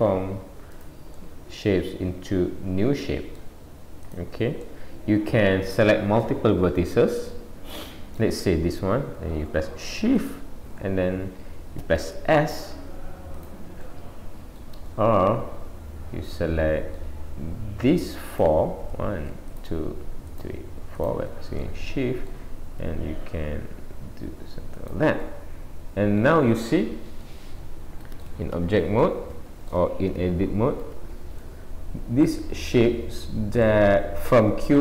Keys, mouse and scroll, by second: 1.1 middle click, 4.1 click, 4.6 middle click, 6.2 middle click, 10.2 shift+click, 12.2 s, 13.9 middle click, 14.9 middle click, 18.3 click, 19.5 shift+click, 21.6 middle click, 22.8 s, 25.2 middle click, 26.7-27.2 scroll down 1, 27.2 middle click, 27.2-28.1 scroll down 1, 28.6 Tab, 29.0 middle click, 30.1 Tab, 30.9 Tab, 31.4 middle click, 32.6 middle click, 33.6 middle click.